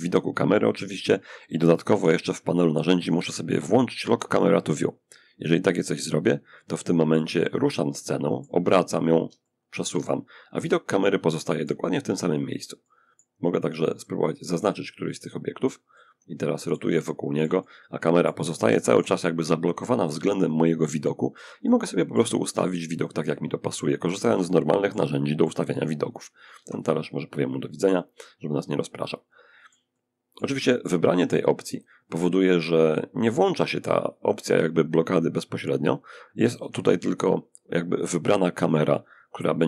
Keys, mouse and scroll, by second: 0.0-0.7 scroll up 1, 1.1 n, 4.7 click, 6.3-7.9 middle drag, 7.9-8.5 scroll down 1, 8.5 shift+scroll down 1, 8.6-11.4 shift+middle drag, 11.6-13.0 drag, 12.0 middle click, 13.7 click, 14.5 click, 16.7-18.1 shift+middle drag, 18.1 shift+n, 20.9-25.9 shift+middle drag, 25.2 click, 25.8 x, 26.0 click, 27.2-30.2 middle drag, 31.0 click, 35.8 n.